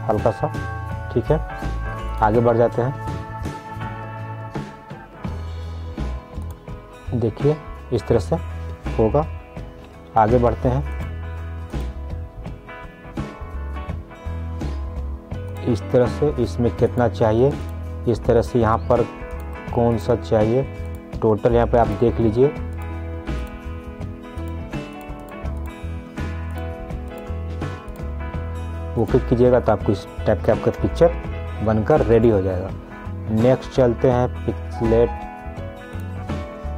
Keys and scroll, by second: 9.9 ctrl+z, 31.0 ctrl+z.